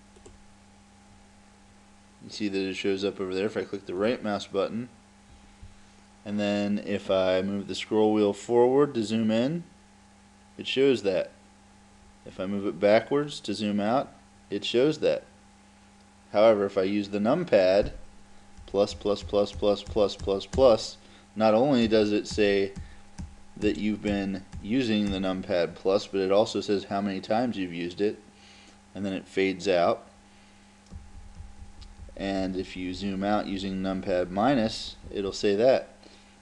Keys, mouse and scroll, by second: 0.2-2.0 drag, 4.0 right click, 7.9-10.6 middle drag, 11.8-14.8 middle drag, 18.7 KP_Add, 19.0 KP_Add, 19.3 KP_Add, 19.6 KP_Add, 20.0 KP_Add, 20.4 KP_Add, 20.6 KP_Add, 21.9 KP_Add, 22.4 KP_Add, 22.8 KP_Add, 23.2 KP_Add, 23.7 KP_Add, 24.2 KP_Add, 24.6 KP_Add, 25.1 KP_Add, 31.0 KP_Subtract, 31.2 KP_Subtract, 31.4 KP_Subtract, 31.6 KP_Subtract, 31.9 KP_Subtract, 32.0 KP_Subtract, 32.2 KP_Subtract, 32.4 KP_Subtract, 32.6 KP_Subtract, 32.8 KP_Subtract, 33.0 KP_Subtract, 33.2 KP_Subtract, 33.4 KP_Subtract, 33.5 KP_Subtract, 33.7 KP_Subtract, 33.9 KP_Subtract, 34.1 KP_Subtract, 34.3 KP_Subtract, 34.5 KP_Subtract, 34.7 KP_Subtract, 34.9 KP_Subtract, 35.1 KP_Subtract, 35.3 KP_Subtract.